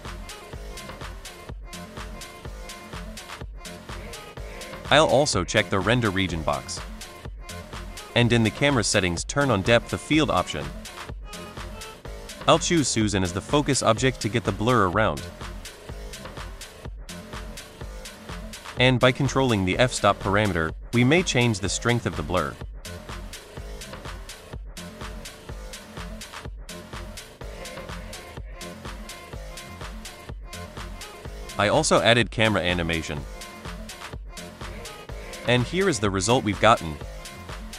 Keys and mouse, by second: 3.9 click, 5.0 click, 7.8 click, 8.8 click, 10.1 click, 11.8 shift+middle click, 13.1 click, 14.4 click, 18.3-20.6 drag, 23.3-24.6 drag, 26.7 shift+middle click, 27.5 click, 28.6 space, 32.8 space, 36.0 space.